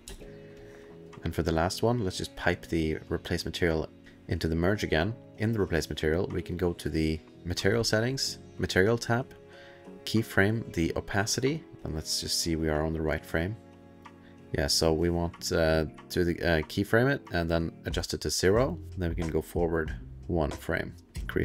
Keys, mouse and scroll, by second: 0.1 alt+space, 0.1 alt+click, 0.5 alt+click, 1.0 click, 1.0 middle click, 1.7 middle click, 2.4 click, 4.0 click, 5.2 click, 6.5 click, 10.3 click, 12.6 alt+middle click, 12.6 click, 17.4 click, 19.6 click, 20.9 click.